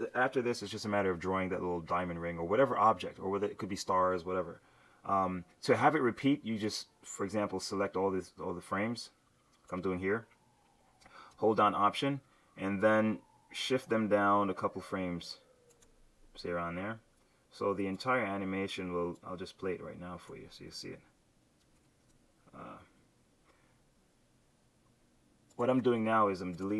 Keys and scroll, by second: 21.8 shift+F7.